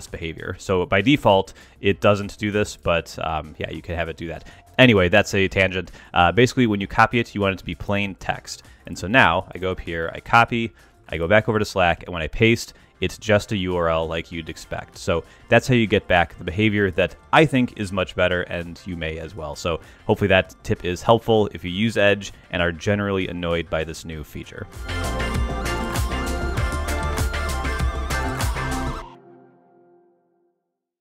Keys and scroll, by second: 2.9 ctrl+Tab, 10.1 super+c, 11.9 super+v.